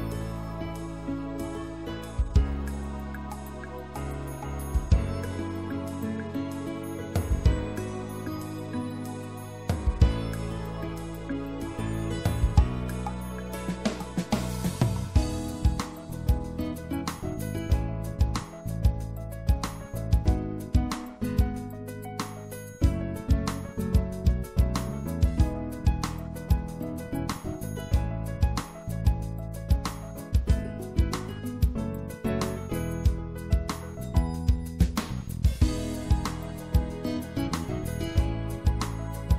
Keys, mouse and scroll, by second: 2.9-5.2 drag, 9.2-10.3 middle drag, 10.3-12.7 drag, 12.7-14.3 middle drag, 14.3-17.3 drag, 21.3-23.0 middle drag, 29.7-33.6 right drag, 33.6-34.7 middle drag, 34.8-36.9 middle drag.